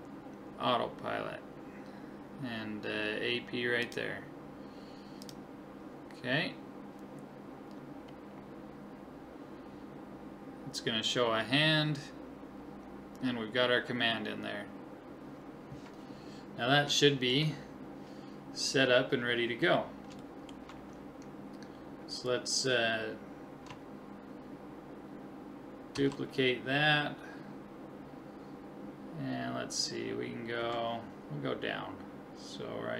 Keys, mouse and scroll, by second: 5.3-7.2 drag, 8.4-10.3 middle drag, 17.0-18.7 middle drag, 26.0 shift+d.